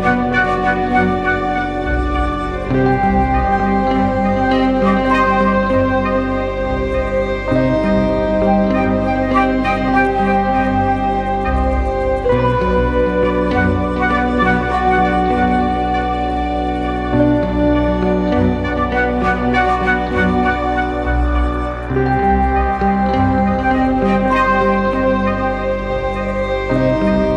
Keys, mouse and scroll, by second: 6.0-6.6 scroll up 1, 6.6-9.0 scroll down 1, 10.0 alt+click, 13.9 double click, 15.4 ctrl+=, 15.7 ctrl+=, 16.4-21.0 scroll down 1, 26.4 double click.